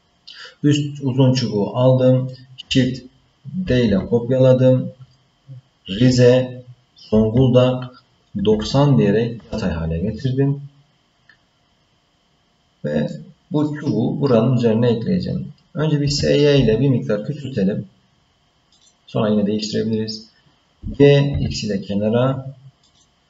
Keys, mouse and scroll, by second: 3.7 shift+d, 13.1 middle click, 16.0 s, 20.8 g.